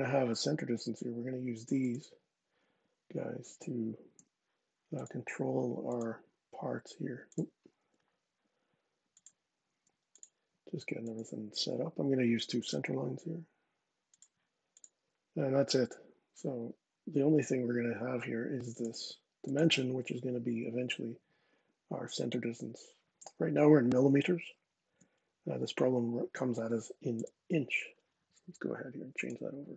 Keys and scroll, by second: 4.0 x, 7.6 Escape, 9.5 x, 17.2 d, 27.0 Return.